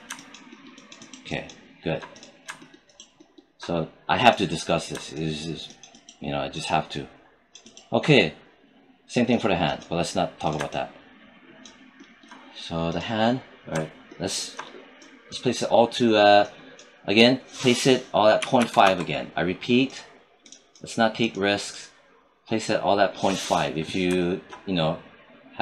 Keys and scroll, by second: 18.2 ., 18.4 5, 18.7 Return.